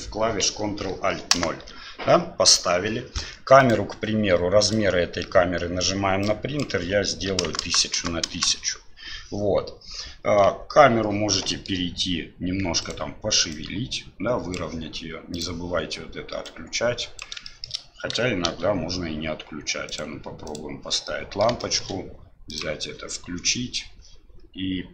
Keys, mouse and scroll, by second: 3.6 click, 6.4 click, 7.6 KP_0, 10.5 KP_7, 11.5 middle click, 12.8 right click, 13.5 click, 16.5 click, 17.5 shift+middle click, 18.4 shift+a, 21.1-21.4 middle drag, 21.6 shift+middle drag, 22.6 click.